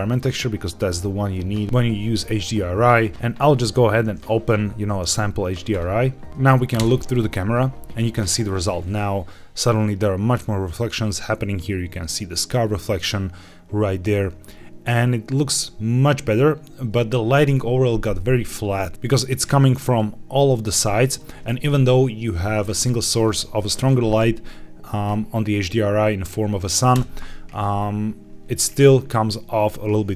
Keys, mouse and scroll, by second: 3.1 click, 5.6 click, 6.9 KP_0, 8.7 scroll up 2, 14.4-15.2 scroll down 2, 15.2-15.9 scroll up 1, 15.9-17.6 scroll down 1, 19.1 middle click, 19.9-21.1 middle drag, 26.9 KP_0.